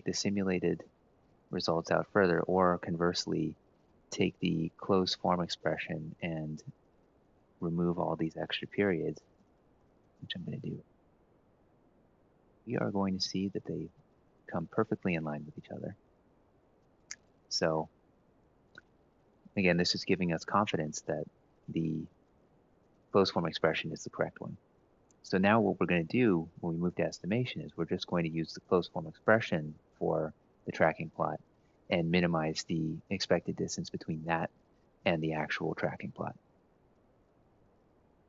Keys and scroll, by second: 2.4 Up, 6.3 Up, 7.0 ctrl+Right, 8.1 Down, 8.3 Down, 8.8 Down, 9.0 ctrl+Left, 9.5 Right, 10.2 Up, 10.4 Up, 10.6 Up, 10.9 shift+Down, 11.2 shift+Down, 11.6 ctrl+shift+Right, 12.0 Delete, 12.4 Left, 12.6 Left, 13.2 Left, 13.4 Left, 13.6 Left, 13.8 Left, 14.1 Left.